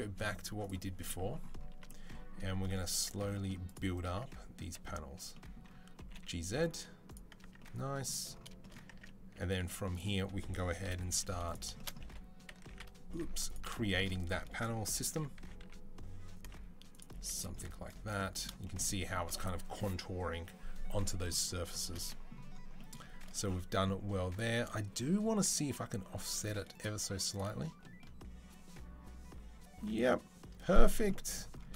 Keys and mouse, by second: 0.4 click, 2.4 Tab, 2.9 Tab, 3.5 click, 3.6-7.3 middle drag, 4.5 a, 5.8 g, 7.3 Tab, 8.7 Tab, 9.4 z, 10.7 KP_7, 10.9 z, 11.9 2, 12.3 x, 13.2-26.6 alt+middle drag, 17.0 z, 26.6-31.7 drag.